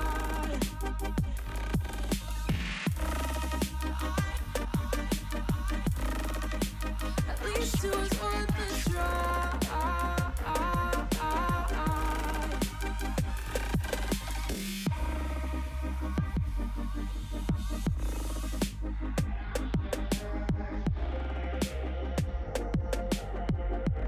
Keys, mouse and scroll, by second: 0.9 r, 1.5 g, 2.5 r, 4.6 r, 5.3 g, 6.2 s, 7.3 g, 8.2 s, 9.4 g, 10.5 r, 11.3 scroll down 3, 11.5 alt+z, 11.9-12.8 scroll down 5, 12.8 KP_3, 13.2 alt+z, 13.4 shift+middle click, 13.6-14.0 scroll up 4, 14.0 shift+middle click, 14.3 g, 16.6 scroll down 3, 16.8 middle click, 17.2-18.0 scroll up 4, 18.0 scroll down 2, 18.2 middle click, 18.5 s, 20.0 ., 20.9 ,, 21.6 middle click, 21.7-22.0 scroll up 1, 22.0 s.